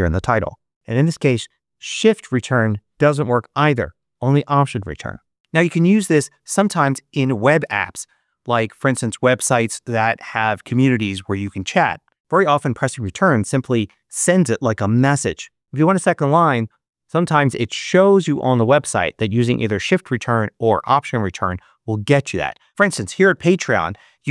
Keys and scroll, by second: 1.9 shift+Return, 22.7 super+BackSpace, 22.9-23.9 typing.